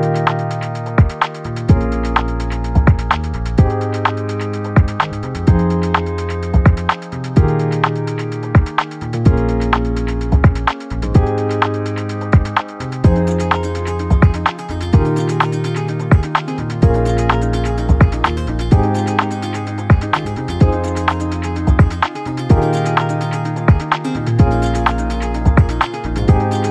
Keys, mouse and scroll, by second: 6.7 click, 11.2-17.8 drag, 17.8-26.7 drag.